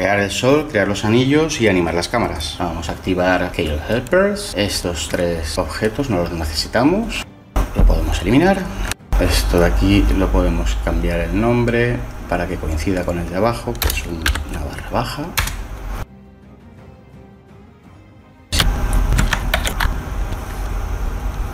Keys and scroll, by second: 8.8 Delete, 13.7 BackSpace, 14.1 shift+-, 15.3 Return, 15.9 Delete, 18.5 shift+a, 19.1 Tab, 19.4 a, 19.7 Delete.